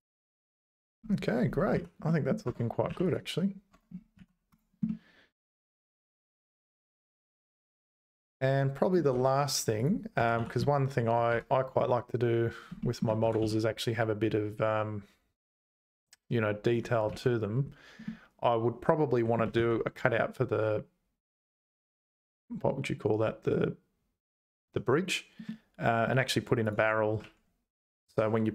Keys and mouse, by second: 1.7 z, 2.0 middle click, 2.5 Tab, 2.9 3, 3.1 click, 3.7 Tab, 4.2 z, 4.9-8.9 middle drag, 9.2 `, 9.8 click, 10.2 g, 12.8 shift+middle click, 18.3-19.4 middle drag, 25.5 middle click, 26.1 right click, 26.6 click.